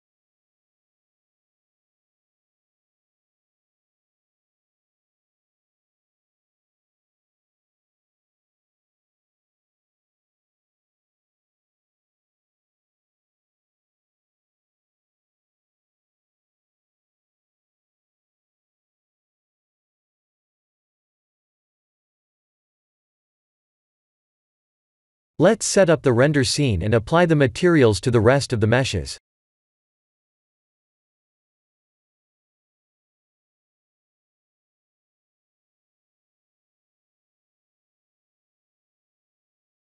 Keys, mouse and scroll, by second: 2.8 click, 4.8 click, 6.5 click, 7.2 click, 10.5 click, 10.8 middle click, 14.9 middle click, 15.3 middle click, 18.5 middle click, 18.8 middle click, 20.2-20.8 scroll down 2, 20.6 middle click, 23.6 shift+middle click, 24.2 click, 24.4 b, 25.4 x, 26.4 shift+middle click, 27.3 shift+middle click, 30.7 ctrl+alt+KP_0, 31.5 shift+`, 35.1-35.5 scroll up 3, 36.2-37.7 scroll down 2, 37.7 click, 37.7-38.2 scroll down 1.